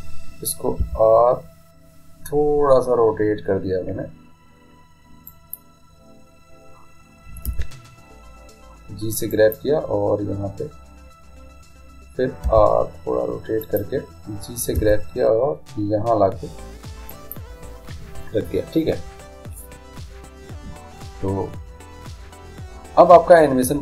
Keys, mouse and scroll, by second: 1.1 r, 7.8 g, 13.0 r, 15.1 g.